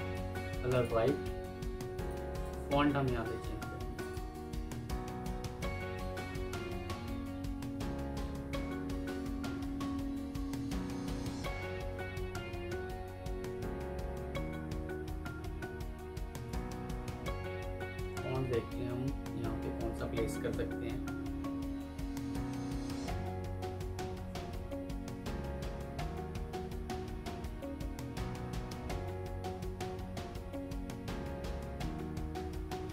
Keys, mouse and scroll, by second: 1.6 F2, 7.7-11.6 scroll down 1, 12.2 Down, 12.4-13.7 Down, 13.8 Down, 14.5 Down, 14.7 Down, 14.8 Down, 16.5 Down, 17.3 Down, 17.7 Down, 17.9 Down, 22.0 Down, 22.2 Down, 23.0 Down.